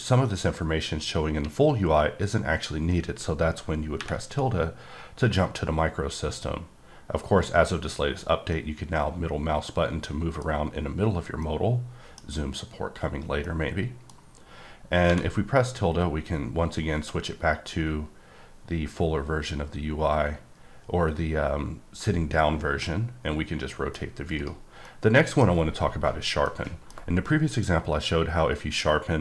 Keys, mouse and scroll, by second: 8.5-10.7 middle drag, 11.4 middle click, 13.4 middle click, 17.7 scroll down 1, 19.6-21.9 scroll up 4, 23.1 middle click, 24.4 right click, 24.8 middle click, 25.3 scroll down 1, 26.4 middle click, 26.9 scroll down 1.